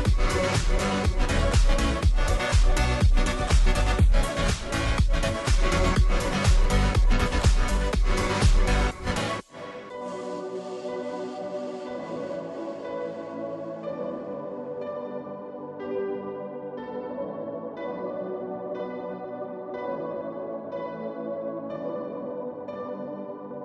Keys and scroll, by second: 0.3 ], 0.4 ].